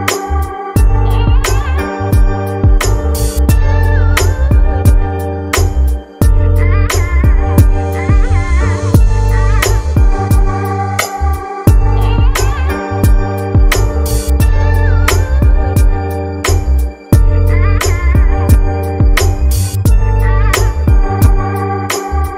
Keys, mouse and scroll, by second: 5.1 click, 8.0-8.4 scroll down 2, 9.0-22.3 drag.